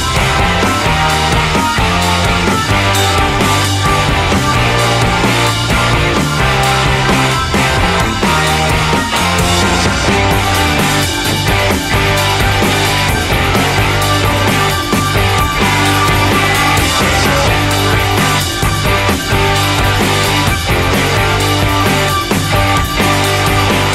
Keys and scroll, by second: 4.4-6.0 typing, 21.7 r.